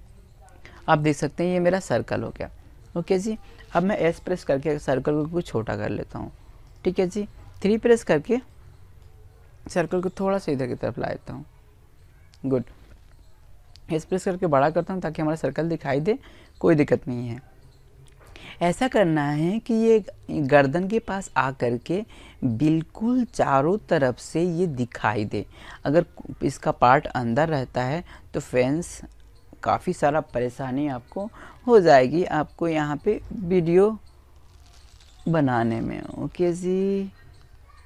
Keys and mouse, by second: 2.3 s, 4.5 click, 5.8 KP_3, 7.6 click, 9.3 right click, 11.2 s, 13.3-15.1 middle drag, 16.7 middle click, 20.4-22.4 middle drag, 23.7 KP_1, 25.0 click, 28.9 s, 31.4 click, 37.1 KP_1.